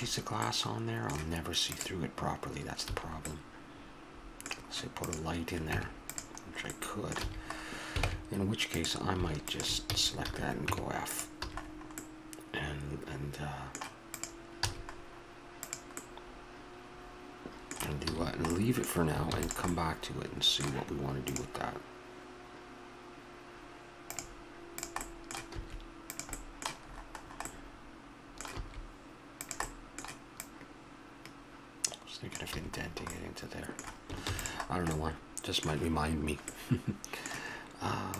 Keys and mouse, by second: 1.7-2.9 right drag, 2.9 a, 5.0 right click, 5.7 Tab, 6.8 middle click, 7.2 a, 8.1 ctrl+Tab, 9.9 f, 10.2 a, 10.7 Tab, 11.5 a, 14.6 a, 16.2-18.0 middle drag, 18.1 a, 19.3 ctrl+s, 24.8 click, 25.2 middle click, 25.6 s, 26.4 click, 26.9-28.6 middle drag, 28.6 s, 30.4-32.3 drag, 32.6 a, 32.9-34.2 middle drag, 34.2 ctrl+s.